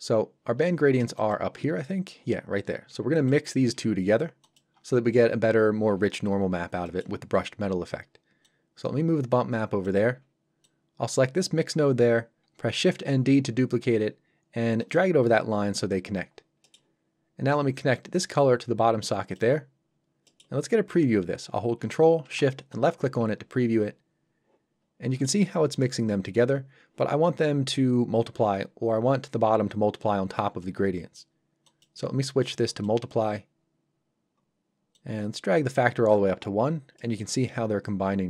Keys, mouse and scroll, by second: 0.5 scroll up 1, 6.6 scroll down 1, 6.8 middle click, 8.4 click, 14.8 click, 16.3 scroll up 1, 16.6 middle click, 18.1 click, 19.9 scroll up 1, 20.2 middle click, 24.8 shift+scroll up 1, 25.1 middle click, 25.4 scroll down 1, 31.6 click, 36.7 scroll up 1, 36.9 middle click.